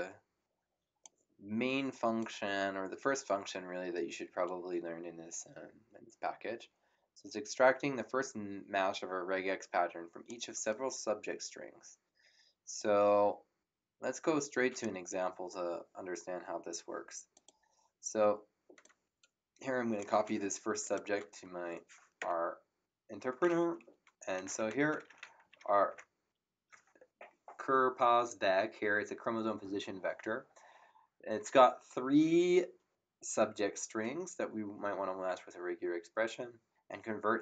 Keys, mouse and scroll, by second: 2.2 click, 12.7 click, 17.3 click, 18.8 click, 20.1 ctrl+c, 20.8 click, 21.1 ctrl+v, 22.2 Return, 24.1-26.1 typing.